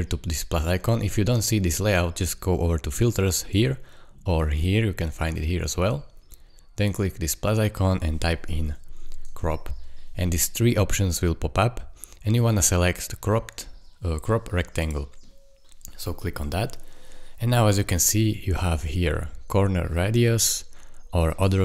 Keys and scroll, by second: 8.4-9.8 typing.